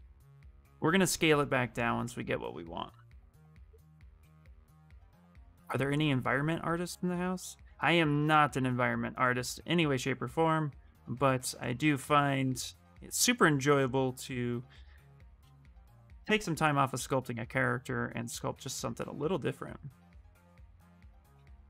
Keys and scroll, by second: 2.8 q, 4.2 w, 18.9 q, 20.6 w.